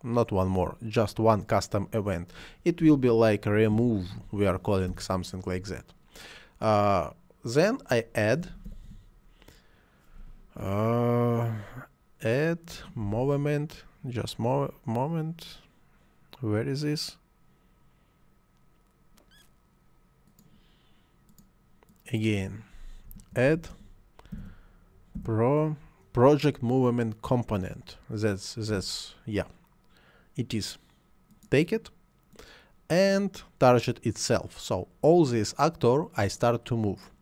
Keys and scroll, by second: 2.8-4.1 typing, 4.9 Return, 8.4 a, 8.7 d, 13.0 m, 23.1-25.2 typing.